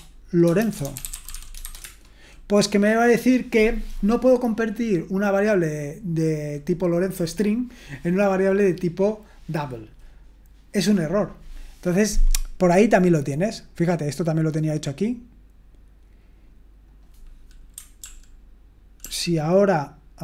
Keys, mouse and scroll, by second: 0.0-1.3 typing, 12.2-14.8 scroll down 1, 14.8-15.6 scroll down 1, 15.6-16.9 scroll down 1, 16.9-17.8 scroll down 1, 17.8 scroll down 1, 18.0 ctrl+p, 19.0 ctrl+p.